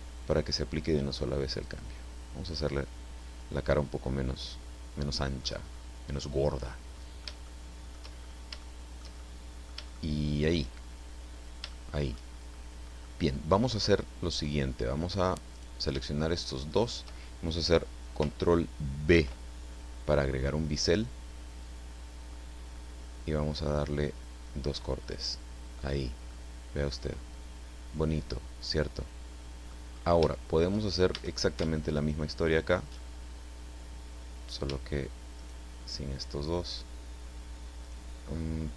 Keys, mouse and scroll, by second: 1.6 click, 2.2-2.5 scroll down 1, 2.5-5.6 middle drag, 5.7-6.0 scroll up 1, 6.1-7.4 middle drag, 8.2-8.6 shift+scroll up 1, 8.6-9.8 shift+middle drag, 9.9 shift+middle click, 11.7 shift+middle click, 12.4-13.0 shift+scroll up 1, 13.0 middle click, 13.9-14.7 scroll up 1, 15.5 right click, 16.7 shift+right click, 19.1 ctrl+b, 22.7-23.1 scroll up 2, 25.0 click, 26.3-29.8 middle drag, 29.9-30.3 scroll up 1, 30.3 shift+middle click, 31.1 shift+a, 31.9 alt+shift+right click, 35.3 shift+right click, 37.8 shift+right click, 38.3 shift+middle click.